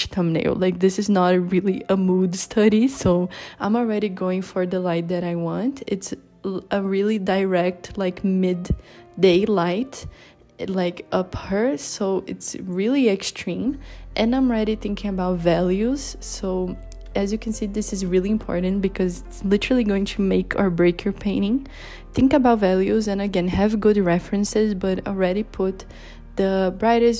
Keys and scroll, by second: 24.3 z, 24.9 h, 26.1 i, 27.1 b.